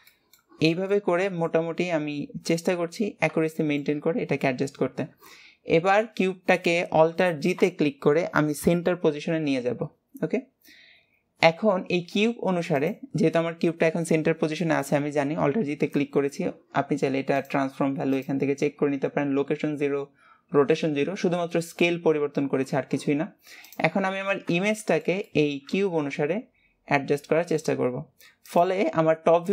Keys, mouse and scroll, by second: 0.2-1.9 middle drag, 3.1 scroll down 6, 3.7 shift+middle click, 4.2 scroll down 2, 24.8-26.2 shift+middle drag, 26.2 g, 29.3-29.5 scroll up 1.